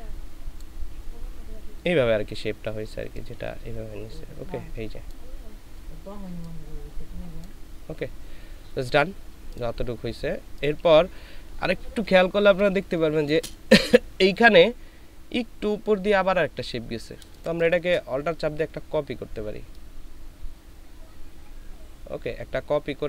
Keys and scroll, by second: 12.4 ctrl+space, 17.2 ctrl+space, 18.2 ctrl+alt+space.